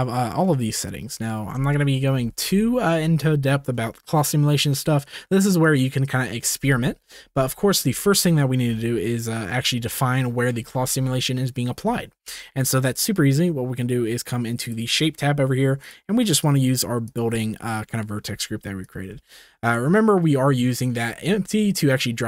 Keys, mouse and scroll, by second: 1.7 shift+middle drag, 6.9 ctrl+s, 14.6 click, 16.0-17.4 drag, 18.8 click, 19.2 space.